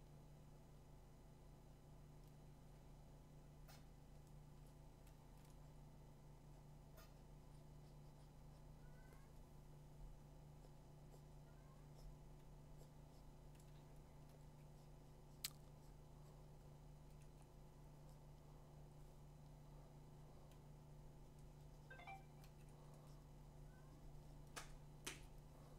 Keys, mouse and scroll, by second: 4.7-7.8 drag, 14.3-18.3 drag, 16.9 ], 17.2 ], 22.4 ], 22.7 ], 25.2 click.